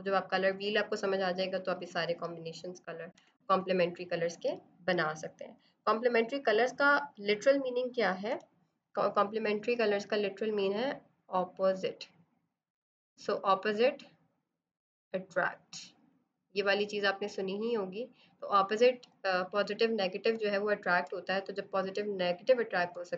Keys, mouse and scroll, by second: 3.0 ctrl+0, 8.2 b, 10.0 click, 19.0 z, 19.4 click, 20.2 space, 20.4 click, 20.7 space, 22.2 click, 22.8 space, 22.9 click.